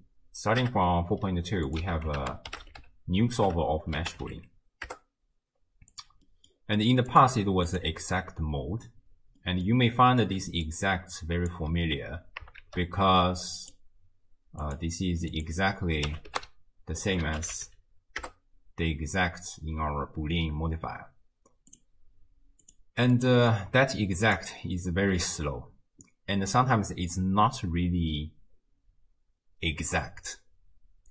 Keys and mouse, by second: 1.8 x, 2.2 ctrl+a, 4.4 o, 6.3 middle drag, 7.1-7.9 drag, 9.4 middle click, 10.5 d, 10.7 click, 11.5 d, 11.7 d, 12.7 shift+a, 15.4-18.3 drag, 17.7 o, 21.7 click, 22.7 click, 23.2 click, 24.2 click.